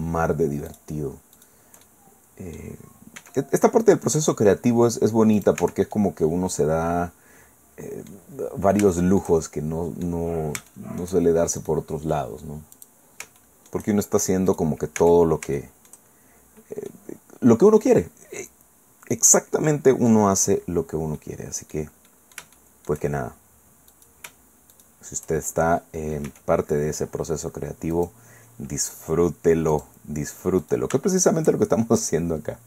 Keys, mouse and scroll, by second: 0.7 shift+right click, 1.4 shift+right click, 1.8 shift+right click, 3.2 e, 5.4 middle click, 5.6 Tab, 6.2-8.3 drag, 8.3 middle click, 8.5-8.9 scroll down 3, 8.9 shift+middle click, 9.2-10.2 shift+drag, 10.2 middle click, 10.4 scroll up 2, 10.7 shift+middle click, 11.6 click, 12.7 click, 13.4 shift+middle click, 15.0 Tab, 15.6 shift+middle click, 16.4 shift+scroll up 1, 16.9-20.3 middle drag, 20.7-21.2 scroll down 2, 21.2 middle click, 22.1-23.1 middle drag, 23.9 right click, 24.7 shift+right click, 26.3 e, 27.9 click, 29.7 click, 30.6 click, 31.2 shift+right click, 32.0-32.6 drag.